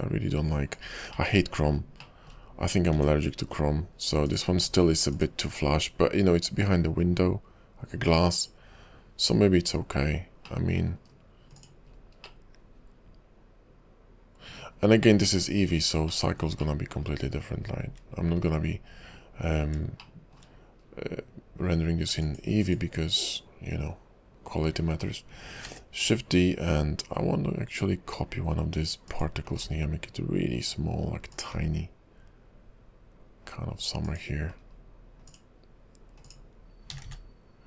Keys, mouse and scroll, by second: 1.3 middle click, 2.2 shift+middle click, 3.0 `, 3.5 KP_5, 4.4 click, 5.2 click, 8.4 click, 10.7 middle click, 11.2 KP_5, 11.6 click, 12.1 scroll down 2, 12.4 middle click, 15.5 KP_5, 16.3 shift+middle click, 16.8 middle click, 17.2 KP_5, 17.8-18.1 scroll up 2, 18.5 KP_5, 19.8 `, 20.2 shift+middle click, 21.1-21.5 scroll up 2, 22.3 click, 22.7 click, 25.8 shift+d, 29.6 s, 31.6 g, 34.7-35.4 scroll down 4, 35.4 click, 36.3 click, 37.0 a, 37.1 a.